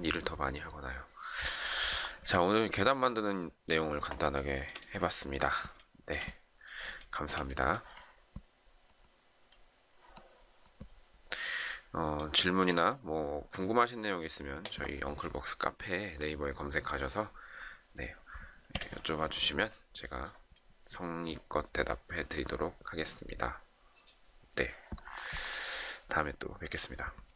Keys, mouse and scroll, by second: 1.9-2.2 shift+scroll down 1, 2.2 shift+middle click, 4.3 shift+middle click, 5.7 shift+middle click, 7.0 shift+middle click, 12.6 shift+middle click.